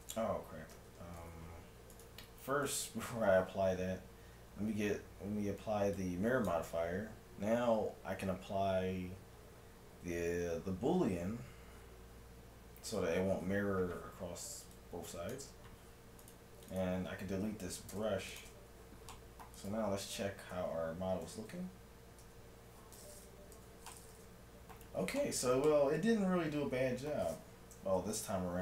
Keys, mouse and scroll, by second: 0.8 ctrl+z, 1.9-4.6 right drag, 6.0-7.8 drag, 14.7-16.5 drag, 16.3-18.4 right drag, 18.0 x, 19.1 middle click, 21.2 right click, 22.2 Tab, 23.6-25.4 middle drag, 23.6 a, 26.1 middle click, 26.2 middle click, 26.8-28.2 middle drag, 28.2 shift+Tab.